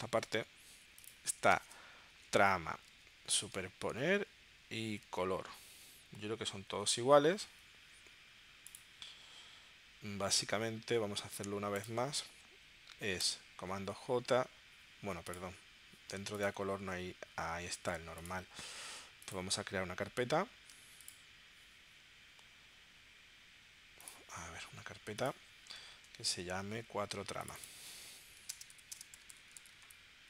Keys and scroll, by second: 1.6-5.0 typing, 2.7 Down, 3.8 Down, 5.9 Up, 6.6 Down, 7.3 super+Tab, 13.2 super+j, 25.9 super+Tab, 26.9 super+Tab, 28.4-29.7 typing.